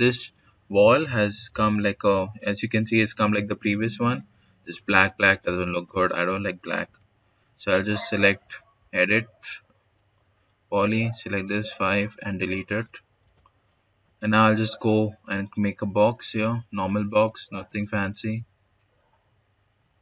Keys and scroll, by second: 6.7 5, 8.3 e, 8.6 d, 10.5 5, 13.1 Delete, 16.9 s, 18.1 s.